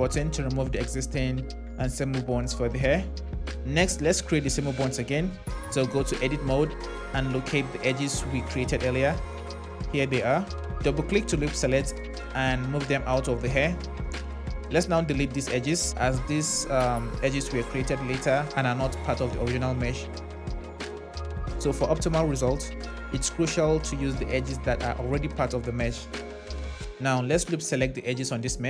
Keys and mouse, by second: 5.4 Tab, 6.8 drag, 10.7 click, 10.8 click, 12.7 g, 13.6 click, 14.9 x, 20.9 click, 24.8 click, 27.2 click.